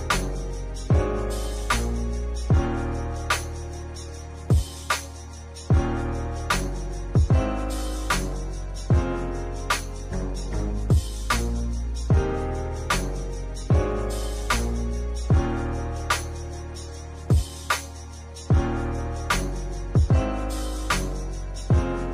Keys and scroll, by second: 0.2 ctrl+z, 1.5 space, 3.3 space, 4.9 space, 9.9 space, 10.7 space, 12.1 space, 12.9 space, 19.7 space.